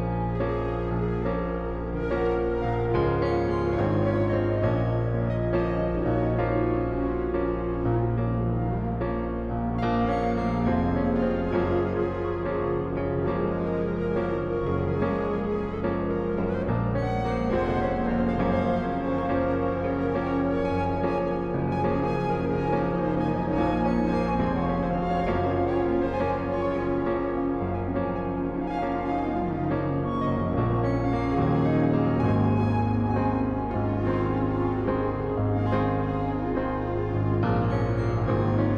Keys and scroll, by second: 7.2 i, 11.9 ctrl+x, 13.1 ctrl+v, 13.9 v, 14.8 ctrl+t, 17.2 alt+shift+Return, 18.7 ctrl+t, 20.3 Return, 23.5 ctrl+t, 25.1 alt+shift+Return, 27.5 ctrl+t, 28.7 alt+shift+Return, 32.9 b.